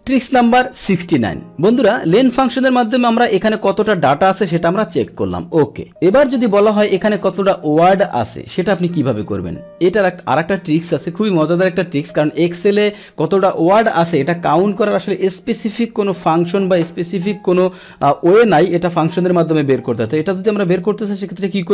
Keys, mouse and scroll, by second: 0.9 click.